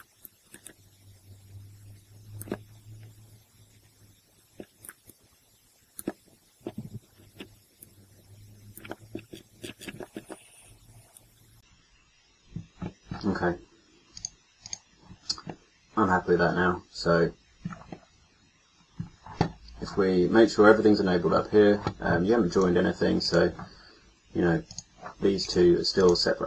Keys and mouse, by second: 0.2-2.5 middle drag, 4.8 right click, 5.1 middle click, 6.8 ctrl+z, 7.8 click, 11.2-12.8 middle drag.